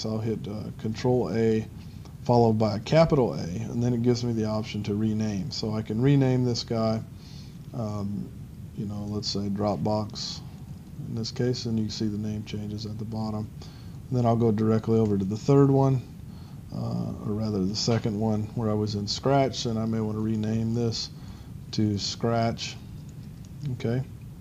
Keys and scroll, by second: 2.4-4.0 typing, 15.1 ctrl+3, 16.0 ctrl+3, 17.7 ctrl+2, 18.0 ctrl+2, 20.5 a.